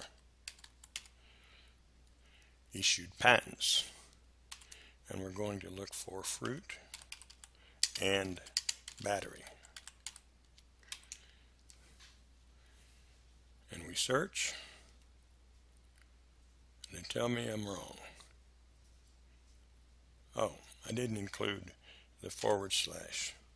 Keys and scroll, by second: 0.0 a, 0.4 b, 0.6 s, 0.9 t, 4.5 shift+9, 6.3-10.9 typing, 22.4 /.